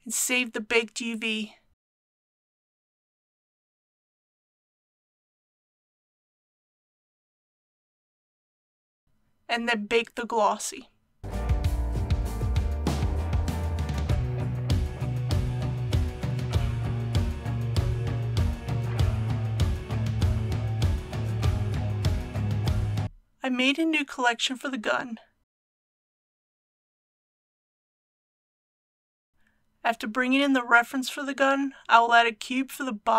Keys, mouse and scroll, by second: 23.7 right click, 25.0 click, 28.0-28.4 typing, 28.7 Return, 29.4 shift+a.